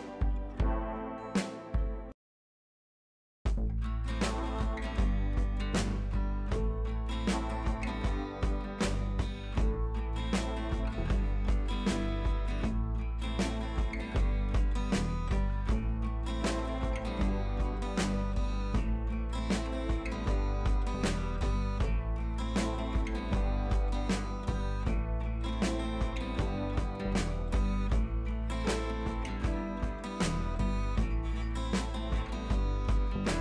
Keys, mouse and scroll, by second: 10.5 scroll down 1, 10.7 click, 11.1 Up, 16.0 click, 16.5-16.8 scroll down 1, 16.8-17.2 scroll up 1, 17.3-19.0 drag, 20.3 ctrl+t, 20.8-23.9 drag, 28.5-29.0 drag, 31.5 click, 33.3 click.